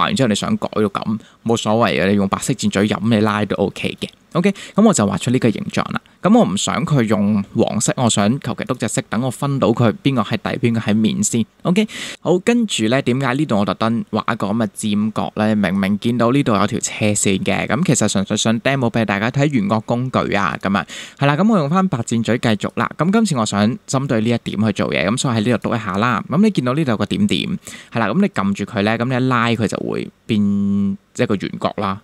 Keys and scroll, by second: 4.6 super+z.